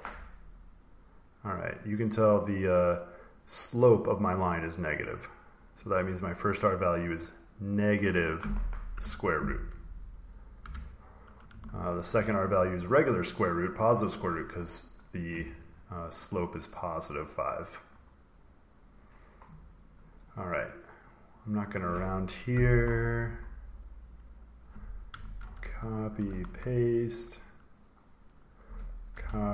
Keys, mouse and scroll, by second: 2.3 click, 3.4 click, 4.9 click, 5.6 click, 5.9-6.9 scroll, 6.9 click, 6.9 scroll, 7.0 click, 7.5 click, 8.8 -, 10.5 Return, 11.6 ctrl+scroll, 12.7-14.0 scroll, 16.3 click, 17.7-18.4 scroll, 18.8 click, 19.7 click, 20.6 scroll, 24.0 click, 24.6 click, 25.4 ctrl+c, 25.9 click, 26.4 ctrl+v, 27.4 click, 28.3 click, 29.1 ctrl+c.